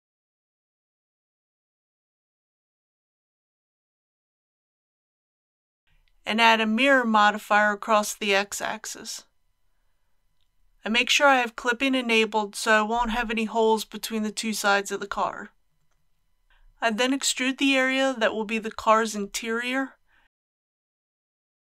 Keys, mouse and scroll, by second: 0.8-1.9 drag, 2.4 z, 2.7 KP_6, 6.8-18.1 drag, 18.9 KP_3.